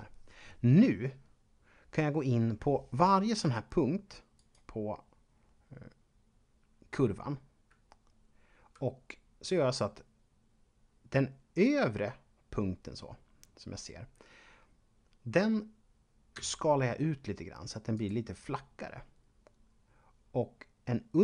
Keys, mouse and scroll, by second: 1.1-2.7 scroll up 1, 4.4 right click, 16.3 s, 17.9 click.